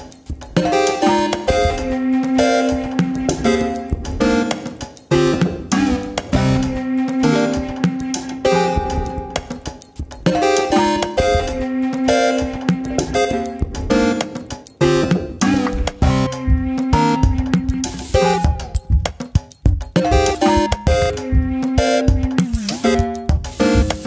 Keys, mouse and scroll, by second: 0.0-0.4 scroll up 4, 0.4 click, 0.9 Tab, 1.8 KP_3, 2.1 scroll up 1, 2.4 shift+middle click, 2.8 click, 3.0 click, 3.4 alt+/, 3.6-4.6 drag, 5.1 click, 5.4 click, 6.2 s, 11.0 Tab, 11.2 scroll down 6, 11.4 middle drag, 11.6 alt+/, 11.8 click, 11.9-12.3 middle drag, 12.3 scroll up 2, 12.4-12.8 shift+middle drag, 12.8 KP_4, 13.2 KP_3, 14.0 shift+middle drag, 14.3 click, 15.2 shift+d, 15.7 click, 16.4 shift+middle click, 16.8 Tab, 17.0-17.3 scroll up 2, 17.3 shift+middle click, 17.5 alt+/, 17.9 alt+/, 18.3 click, 18.5 shift+click, 18.9 shift+middle click, 19.8 click, 21.0 ctrl+z, 21.6 click, 21.8 click, 22.8 click.